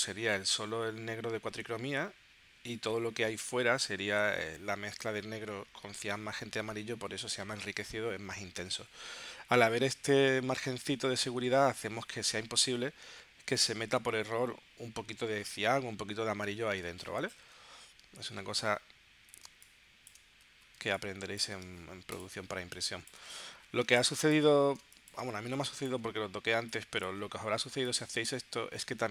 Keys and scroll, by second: 19.5 space, 20.7 space, 22.4 space, 23.8 space, 24.8 space, 25.5 space, 26.8 space.